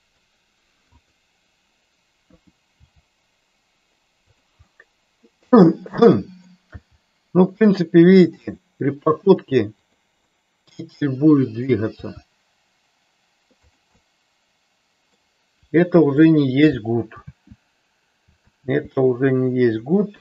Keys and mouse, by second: 0.0 middle click, 1.1 click, 2.7 g, 4.3 click, 4.7-6.6 middle drag, 6.7 g, 9.9 click, 10.5-11.9 middle drag, 12.1 g, 14.1-15.3 middle drag, 17.2 ctrl+z, 18.6 ctrl+z, 20.1 KP_1.